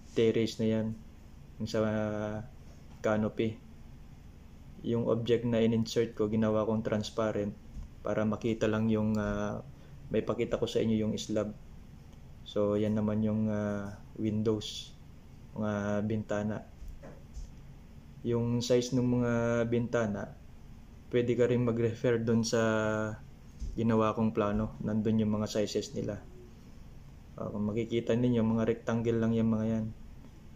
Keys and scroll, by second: 1.0 ctrl+c, 1.1 ctrl+v, 6.6 Left, 6.7 Left, 21.0 ctrl+c, 22.8 ctrl+c, 22.9 ctrl+v, 26.4 ctrl+c, 26.4 ctrl+v.